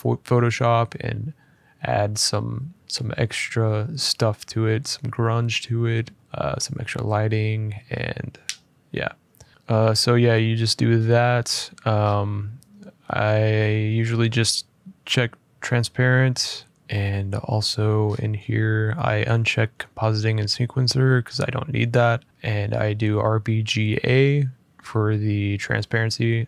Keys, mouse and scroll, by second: 10.7-11.7 scroll, 11.7-13.0 scroll, 13.0-14.1 scroll, 16.7-17.4 scroll, 17.4 click, 17.8-21.1 scroll.